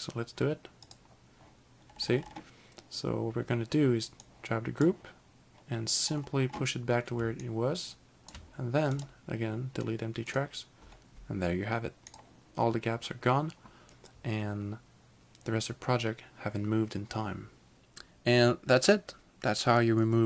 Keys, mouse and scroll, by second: 0.9 click, 1.9-3.4 scroll down 4, 4.4 click, 6.1-6.5 scroll up 4, 7.6 shift+click, 9.0 right click, 10.3 click, 12.1 click.